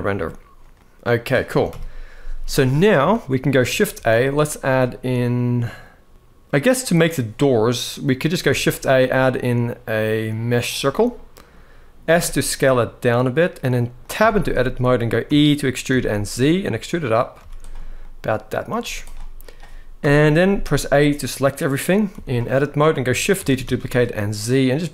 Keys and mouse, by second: 0.5-1.0 middle drag, 1.4 KP_1, 2.8 shift+middle drag, 3.7 shift+a, 7.6-8.0 middle drag, 8.2 shift+a, 10.9-11.2 middle drag, 11.8 s, 13.7 click, 13.9 Tab, 14.2 middle click, 15.0 e, 15.6 z, 16.9 click, 17.1 z, 17.7 middle click, 19.7 z, 19.7 KP_1, 20.3 a, 21.9 z, 23.1 shift+d, 23.4 z.